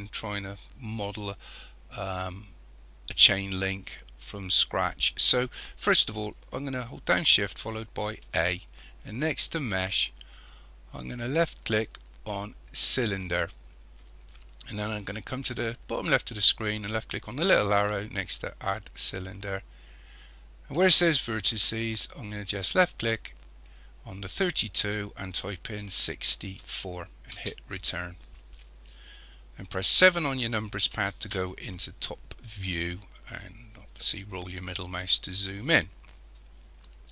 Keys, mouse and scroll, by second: 8.3 shift+a, 19.0 click, 24.3 click, 29.9 KP_7, 31.7-32.7 scroll up 2, 32.7-33.4 scroll up 4, 33.4-36.6 scroll up 4.